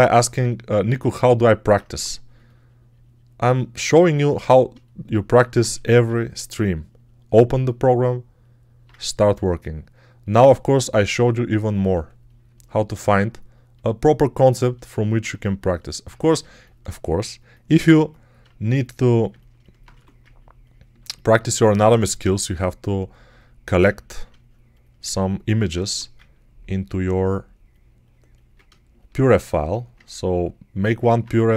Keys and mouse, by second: 1.8 1, 5.6 1, 19.8 1, 25.7 1, 31.2 1.